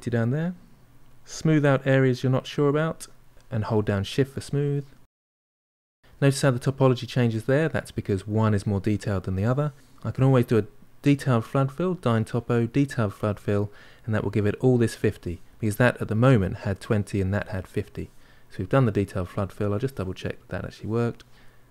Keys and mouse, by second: 0.0 shift+click, 0.5 middle click, 0.9 shift+click, 1.4-2.6 middle drag, 2.6-4.0 shift+drag, 4.0-7.9 middle drag, 11.6-15.1 drag, 18.3-20.7 drag, 20.7-21.7 middle drag.